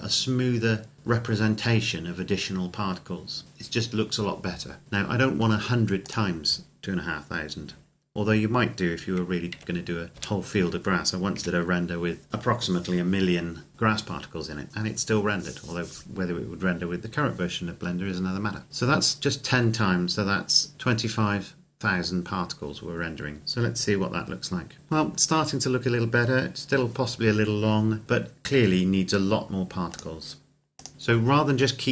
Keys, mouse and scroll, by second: 6.1 click, 9.9 KP_1, 10.4 KP_0, 11.7 KP_Enter, 20.6 scroll up 1, 23.4 click, 30.1 click.